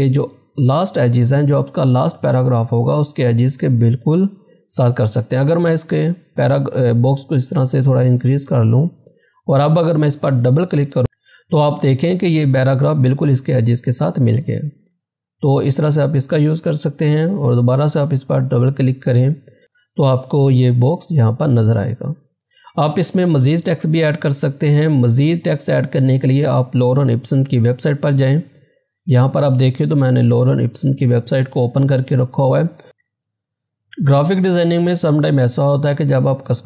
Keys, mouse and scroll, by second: 6.3-8.2 drag, 8.2 scroll down 1, 10.5 click, 17.2 click, 28.6 click.